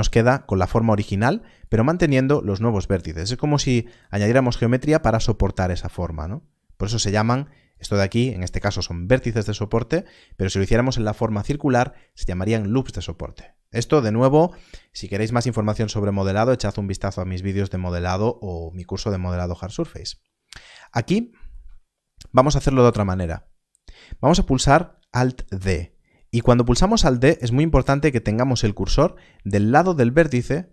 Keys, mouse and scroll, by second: 1.6 click, 7.6 click, 10.0 click, 18.5 click, 19.7-20.6 scroll up 1, 20.7 click, 23.1-25.3 scroll up 1.